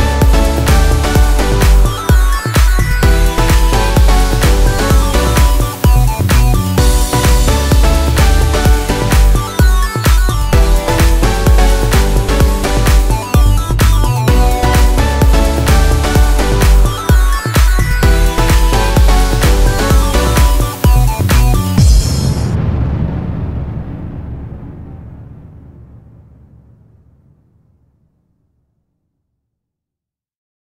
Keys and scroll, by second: 7.0 space, 13.8 F8, 14.1 ctrl+space, 16.3 e, 16.7 F4, 17.0 Escape, 17.3 space, 17.7 u, 17.8 s, 18.3 ctrl+space, 22.8 F3, 23.1 Escape, 26.1 shift+F2, 27.0 F9, 30.5 Escape.